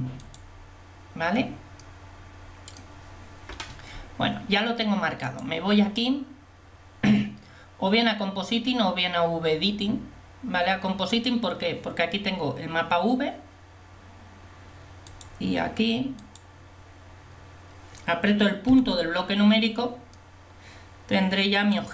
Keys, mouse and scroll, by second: 5.3 click, 15.2 click, 16.4 click, 18.7 KP_Decimal.